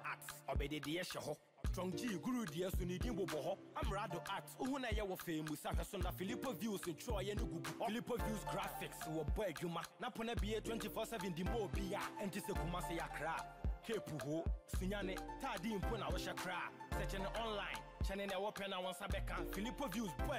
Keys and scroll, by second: 3.8 Delete, 4.5 ctrl+d.